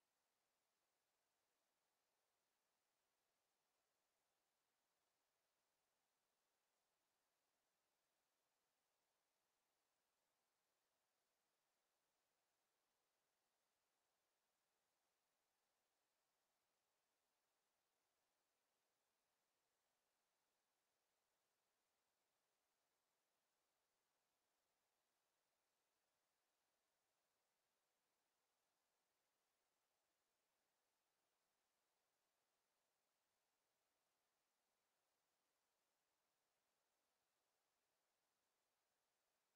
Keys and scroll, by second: 19.8 Escape.